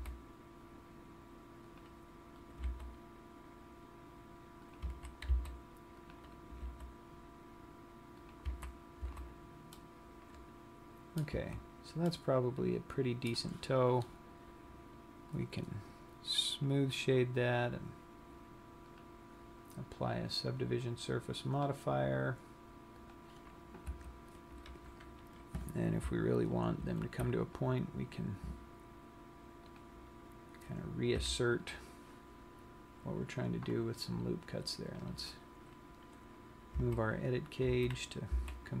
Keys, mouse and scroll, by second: 0.5 c, 1.6 g, 3.1 g, 5.4 click, 5.4 a, 5.8 c, 7.1 g, 9.1 click, 9.1 a, 9.6 z, 10.2 middle click, 11.6 Tab, 12.3 middle click, 15.4 click, 16.8 click, 19.1 click, 23.1 click, 24.1 Tab, 27.0 ctrl+r, 30.1 click, 30.5 scroll down 1, 31.4 KP_3, 35.4 click, 37.2 a, 38.2 z.